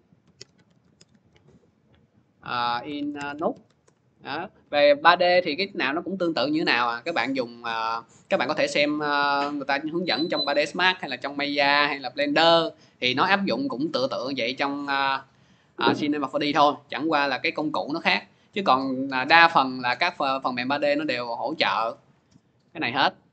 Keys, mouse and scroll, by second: 0.0-1.4 typing, 2.7-4.0 typing, 6.9-8.4 typing, 7.2 click, 10.4 click, 13.2-15.3 drag, 15.6-16.8 drag, 20.9 click.